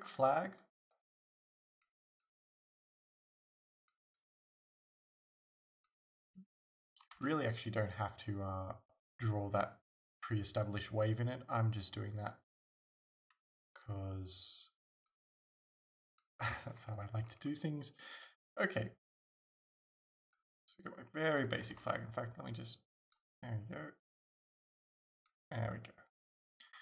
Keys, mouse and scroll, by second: 7.2 ctrl+z, 16.7-17.3 scroll down 2, 17.3-20.4 scroll up 3, 21.8 ctrl+z, 26.7-26.8 scroll down 2.